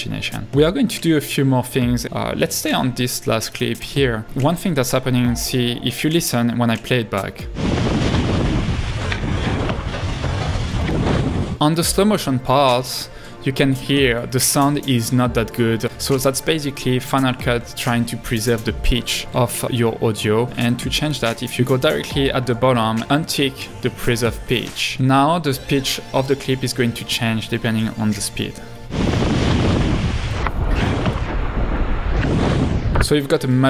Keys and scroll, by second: 3.8 Right, 13.1 space, 19.4 l, 28.4 space, 33.2 space.